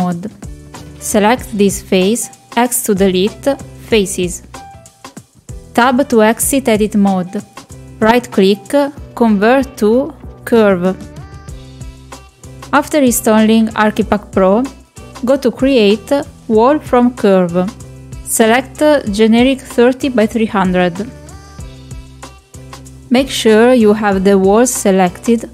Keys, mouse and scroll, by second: 0.1 3, 2.1 Delete, 7.9 Tab, 8.7-11.6 right drag, 15.1 click, 17.9 click, 21.8 click, 22.2-22.8 middle drag, 23.1 middle drag, 23.7 shift+middle click, 24.0 click.